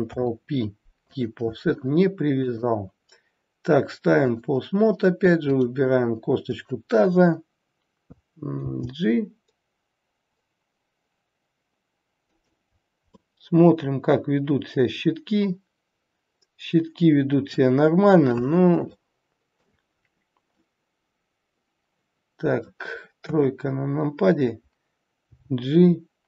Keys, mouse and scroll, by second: 2.3 click, 8.6 g, 12.7-13.0 scroll down 3, 13.1 middle click, 18.1-18.7 scroll up 1, 18.7 scroll up 1, 18.8 shift+middle click, 19.8-20.6 scroll up 1, 20.6 middle click, 20.6 scroll up 1, 23.2 KP_3, 25.2 g.